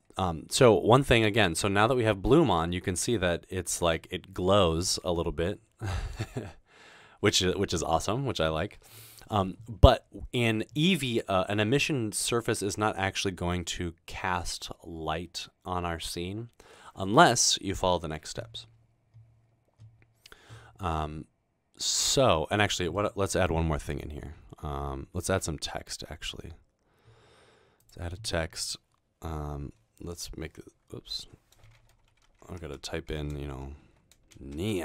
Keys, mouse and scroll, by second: 20.9-22.6 middle drag, 23.1 middle click, 25.5 shift+a, 28.0 a, 30.4 Tab, 31.9-33.0 typing, 34.1-34.8 typing.